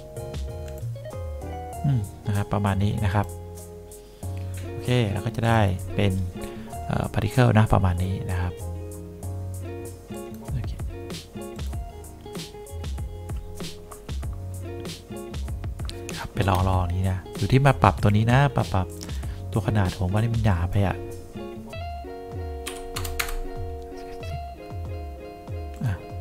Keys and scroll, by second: 22.8 7, 23.0 0, 23.3 Return.